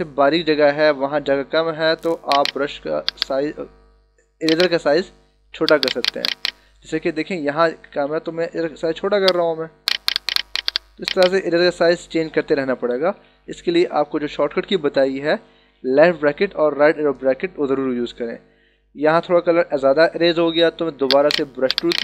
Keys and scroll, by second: 7.7 [, 12.8 ], 14.7 ctrl+-, 16.6 ctrl+=.